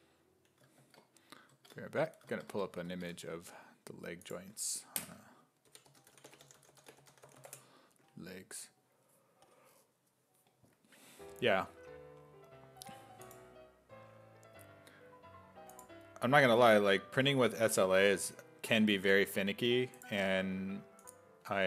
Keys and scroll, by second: 0.8 alt+Tab, 1.5 alt+Tab, 2.5 alt+Tab, 2.9 alt+Tab, 5.5-7.9 typing.